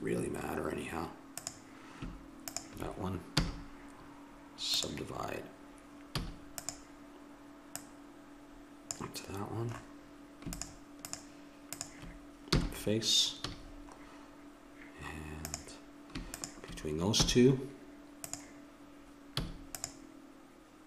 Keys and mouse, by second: 3.4 w, 6.1 a, 6.6-9.7 drag, 10.6-12.5 drag, 12.5 f, 13.5 a, 15.4-18.4 drag, 17.2 w, 19.4 a, 19.7-20.8 drag.